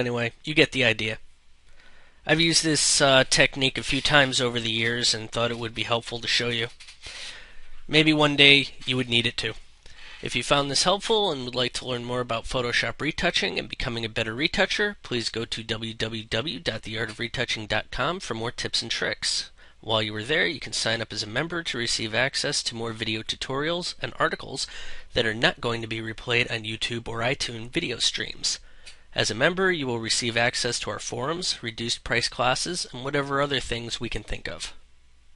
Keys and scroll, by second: 0.0 space, 8.8 ctrl+0.